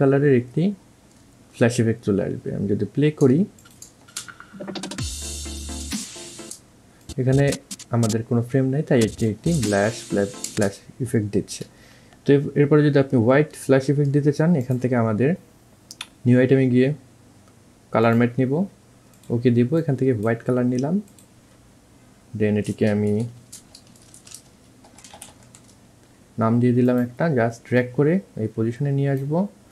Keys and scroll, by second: 4.3 space, 9.8 space, 11.4 alt+space, 23.7-25.7 typing.